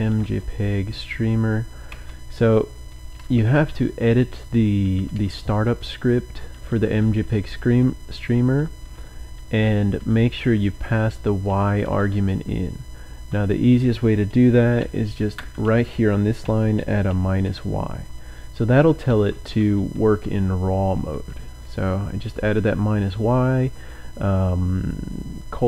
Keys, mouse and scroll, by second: 0.0-1.9 typing, 3.4-4.5 typing, 5.0 Down, 5.6 Down, 6.2 Down, 6.9 Down, 7.6 Down, 8.1 Down, 8.7 Down, 9.4 Up, 9.8 Up, 10.0-11.7 typing, 10.6 Right, 14.7-20.9 typing.